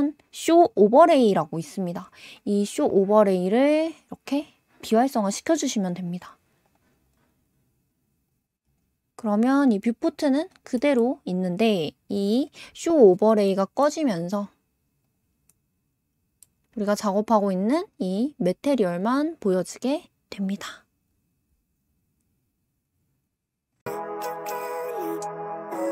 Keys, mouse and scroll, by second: 3.7 click, 6.6-7.1 drag, 7.3 scroll down 6, 8.3 click, 8.7 click, 9.0-9.6 scroll up 4, 9.6-10.1 scroll down 5, 10.1 click, 10.5 scroll up 3, 10.7-11.3 middle drag, 11.3-12.4 scroll down 1, 12.4 click, 13.4-14.1 middle drag, 14.1 g, 14.1 g, 15.5-16.8 middle drag, 17.7-18.4 scroll up 1, 18.4 g.